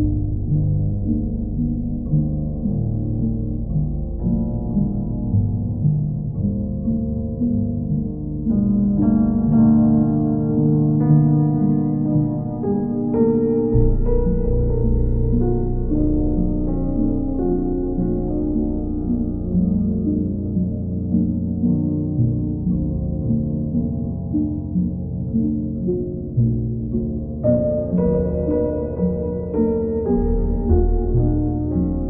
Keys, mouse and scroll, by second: 0.3 click, 0.8 shift+click, 2.0 alt+middle click, 3.2 alt+middle click, 3.2 alt+right click, 4.9 click, 6.8 q, 11.6 alt+click, 12.7 alt+click, 13.3 click, 13.4 alt+click, 13.8 click, 14.2 click, 14.6 click, 17.3 click, 17.5 ctrl+z, 22.0 ctrl+z, 22.2 click, 23.4 click, 23.7 ctrl+z, 24.7 click, 25.2 click, 28.6 click, 29.2 click, 30.2 click, 30.8 shift+click, 31.5 alt+click.